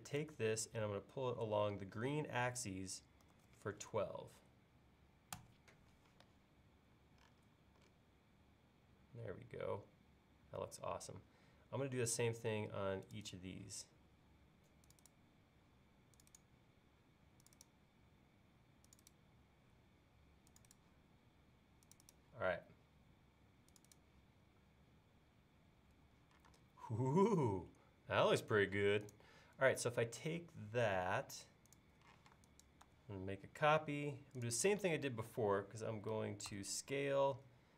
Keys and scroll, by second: 3.3-4.6 typing, 5.4 Return, 26.5 space, 32.2 m, 36.5 s.